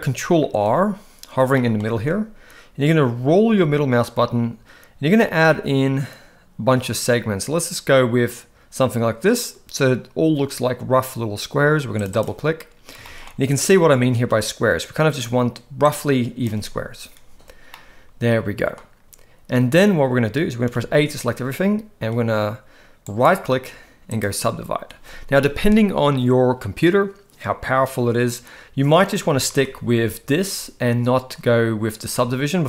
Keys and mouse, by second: 1.6 middle click, 1.9 ctrl+r, 13.1 shift+middle drag, 14.6-15.3 drag, 15.8-16.5 drag, 17.7-18.7 middle drag, 20.7 a, 23.2-24.2 right drag, 29.5 ctrl+z.